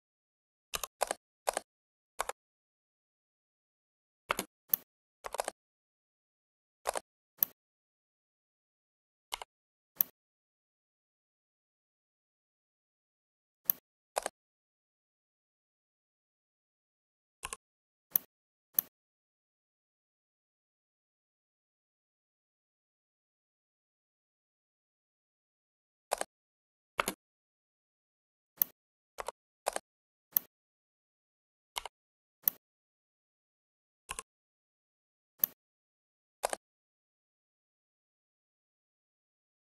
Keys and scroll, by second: 0.6 1, 0.9 0, 2.0 Return, 4.2 space, 26.8 space.